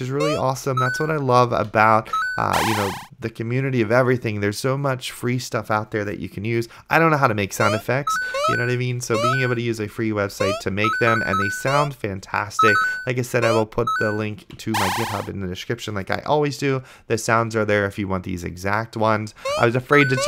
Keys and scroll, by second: 0.4 space, 1.0 a, 1.8 d, 7.8-11.9 typing, 14.6 a, 19.7 space, 19.8 a.